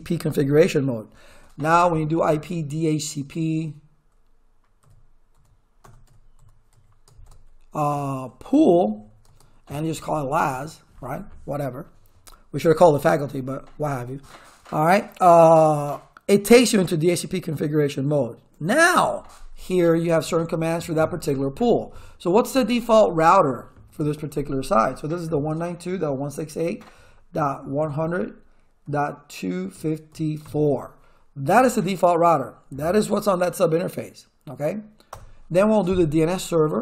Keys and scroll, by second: 4.8-10.7 typing, 20.2 shift+/, 22.3-23.4 typing, 25.1-30.9 typing, 35.1 Return, 36.6-36.8 typing.